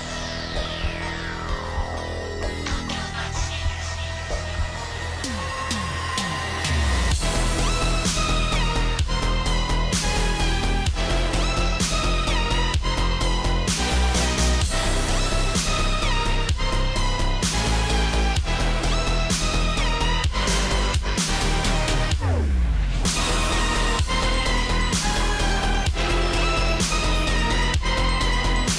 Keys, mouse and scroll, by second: 1.8 ctrl+shift+], 2.1 click, 3.8 click, 4.6 Up, 4.8 Right, 5.5 click, 7.8 shift+click, 8.5 ctrl+c, 9.6 ctrl+g, 10.1 scroll down 1, 10.6-13.2 alt+drag, 13.2 alt+scroll down 1, 13.7 alt+scroll up 1, 14.3 ctrl+d, 14.7-15.3 scroll down 1, 15.3 click, 15.4 alt+scroll down 1, 15.7 alt+scroll up 1, 16.2 space, 16.4 click, 16.4 space, 16.7-18.1 drag, 18.1 ctrl+g, 18.6-20.0 drag, 20.0 ctrl+shift+], 21.3-23.1 alt+shift+drag, 23.1 alt+super+scroll up 2, 23.9 alt+scroll up 1, 24.0 space, 24.1 click, 24.2 space, 24.4 click, 25.6-28.2 alt+shift+drag, 28.2-28.7 alt+shift+drag.